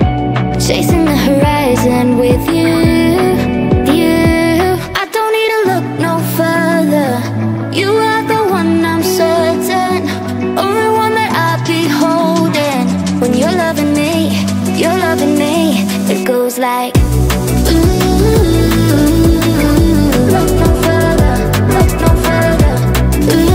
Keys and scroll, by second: 2.0 e, 21.7 space.